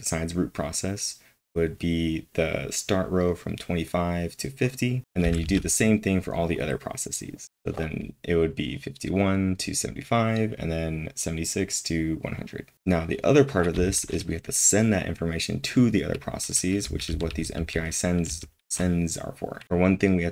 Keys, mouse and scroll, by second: 13.7 j, 15.8-18.3 typing, 19.6 k.